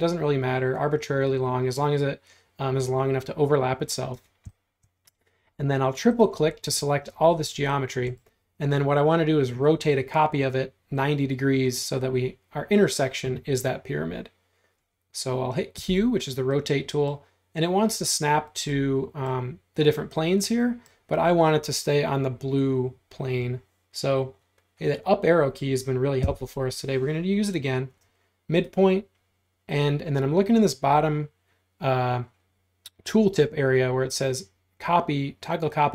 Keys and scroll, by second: 4.2 space, 15.8 q, 26.3 Up.